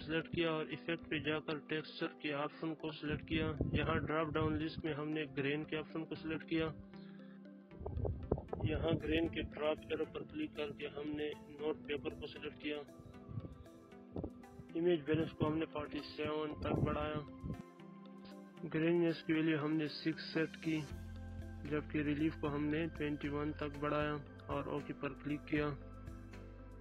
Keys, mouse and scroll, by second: 3.8 click, 9.4 click, 14.3-15.9 drag, 21.1-21.6 drag.